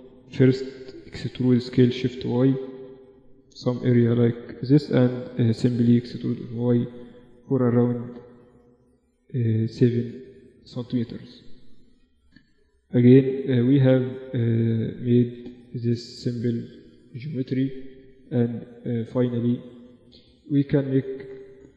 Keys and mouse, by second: 0.9 e, 5.3 e, 10.3 `, 11.1 `, 11.9 Tab, 12.3 Tab, 13.0 Tab, 13.4 Tab, 14.1 Tab, 15.0 KP_1, 15.7 z, 16.9 Tab, 19.0 Tab, 19.5 Tab.